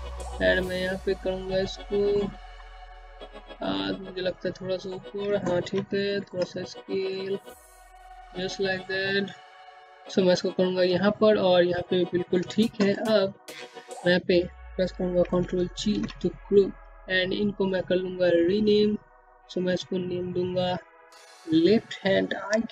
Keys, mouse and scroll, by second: 0.0 click, 1.6 middle click, 2.9 click, 3.7 r, 4.2 middle click, 7.8-10.0 typing, 9.7 scroll down 1, 10.9 scroll down 1, 13.8 ctrl+g, 15.9 click, 21.7 click.